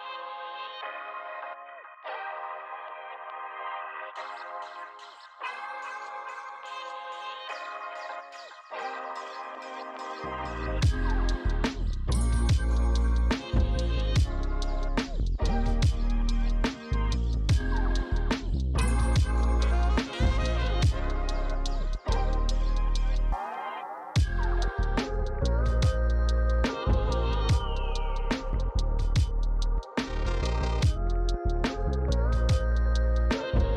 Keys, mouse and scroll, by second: 2.5 click, 4.4-5.8 typing, 19.3 click, 21.3 right click, 23.5 right click, 24.5 click, 33.1 click.